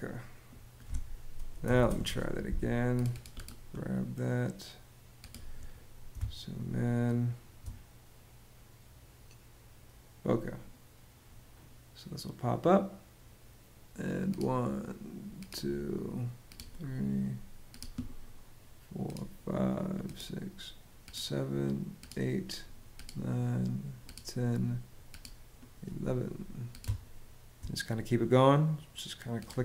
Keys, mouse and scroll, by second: 1.0-2.0 typing, 5.8 space, 26.5 space.